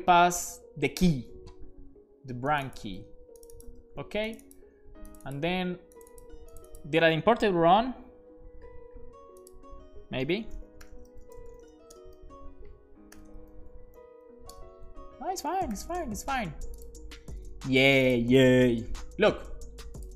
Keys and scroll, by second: 3.1 super+c, 3.7 super+v, 5.4 super+c, 7.1 super+c, 10.3-12.2 typing, 13.2 shift+super+h, 13.7-14.5 typing, 14.6 Return, 15.8 alt+shift+f, 16.1 super+s.